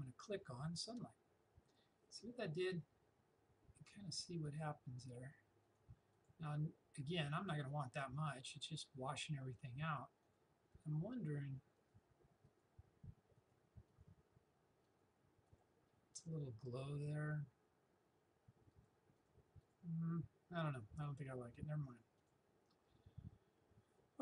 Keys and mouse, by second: 0.8 click, 4.5 click, 18.8 click, 22.2 click.